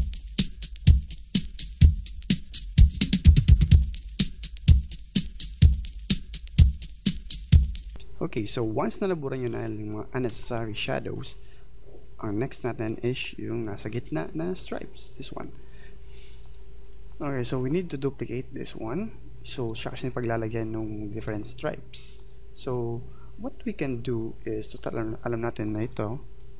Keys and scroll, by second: 10.3 space, 15.9 Delete.